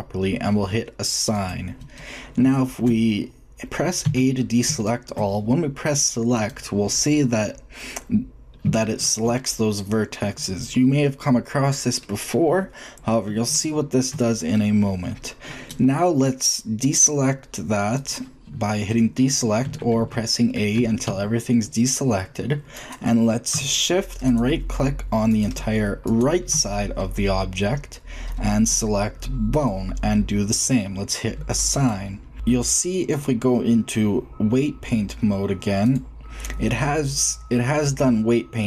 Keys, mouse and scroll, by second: 3.7 shift+middle click, 3.9 shift+a, 7.7-8.7 middle drag, 11.4-11.7 shift+middle drag, 11.8 middle click, 11.8 click, 12.0-12.4 drag, 13.5-14.1 shift+middle drag, 16.2 shift+middle click, 17.8 click, 19.5 a, 19.7 a, 20.6 a, 20.9 a, 26.9 click, 27.4-28.8 middle drag, 29.3-31.4 drag, 31.5 click, 32.3 middle click, 36.6-38.5 middle drag.